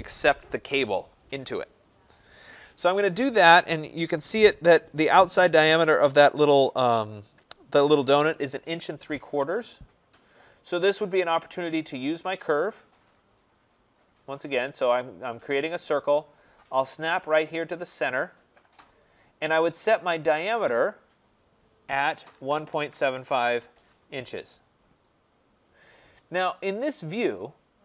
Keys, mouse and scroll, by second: 13.3 click, 18.5 click, 22.0-23.9 typing.